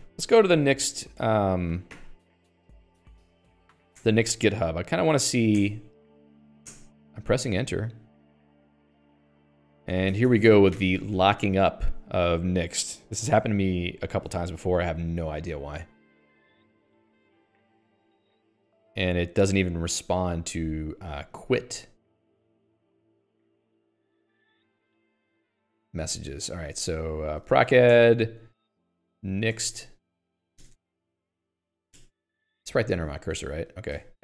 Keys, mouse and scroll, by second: 25.8 Escape, 26.4 Escape, 26.8 alt+x, 27.6-32.3 typing, 29.1 ctrl+s, 33.0 Escape, 33.4-34.2 typing.